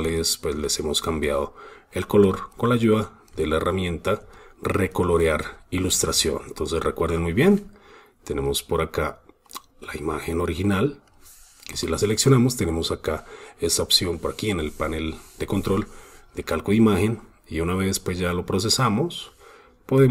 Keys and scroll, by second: 0.3 super+space, 0.9 super+space, 2.2 super+space, 3.2 super+space, 6.1 super+space, 6.9 super+space.